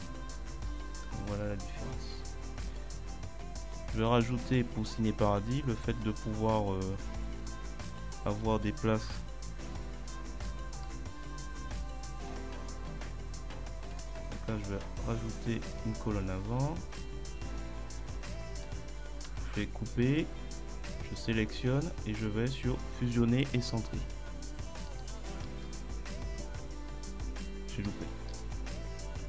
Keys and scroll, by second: 0.3 Left, 0.5 Right, 1.1 ctrl+Up, 2.3 Right, 4.2 Right, 19.3 ctrl+x, 25.5 ctrl+v, 28.4 ctrl+z.